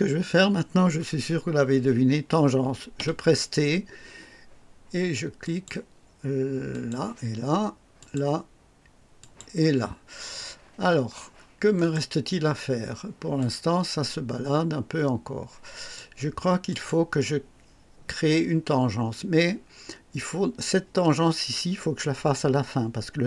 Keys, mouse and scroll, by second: 2.9 t, 5.4 click, 6.7 click, 7.9 click, 9.1 click, 11.7 right click, 13.3-16.1 drag, 16.6 click.